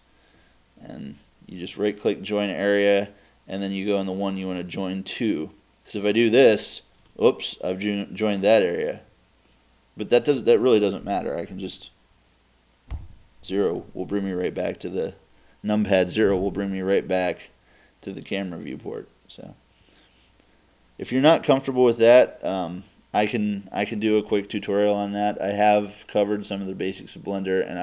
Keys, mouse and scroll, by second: 13.0 KP_0, 18.5 middle click, 18.6-19.3 scroll up 1, 19.3 scroll down 1, 19.4 middle click, 19.6-27.2 middle drag.